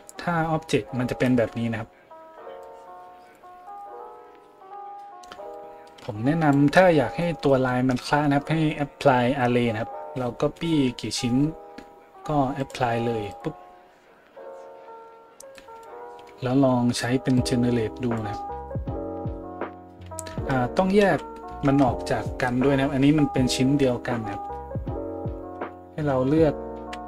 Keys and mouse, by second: 20.3 Tab, 21.0 a, 21.6 Tab, 26.8 a.